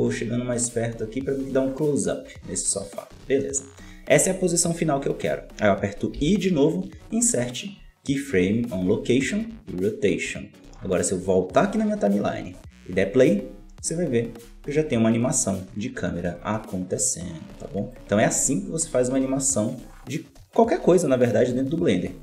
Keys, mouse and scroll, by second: 6.1 i, 11.2-15.9 drag, 16.3-22.2 drag.